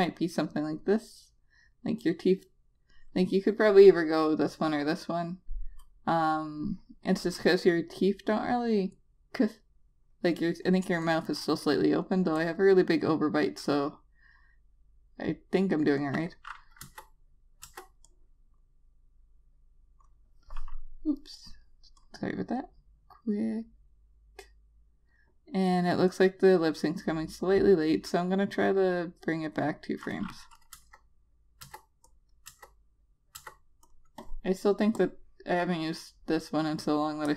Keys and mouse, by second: 11.5 click, 16.5 click, 17.3 Return, 18.2 Return, 18.6 click, 31.4 Return, 32.1 Return, 32.6 click, 33.2 Return, 33.9 Return, 34.4 click.